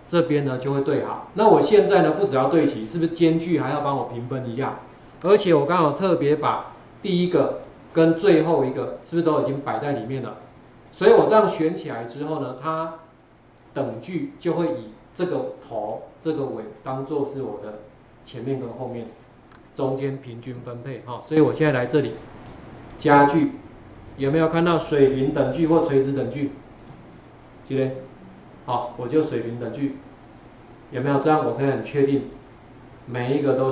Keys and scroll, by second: 0.1 ctrl+4, 6.1 ctrl+0, 21.6 Escape.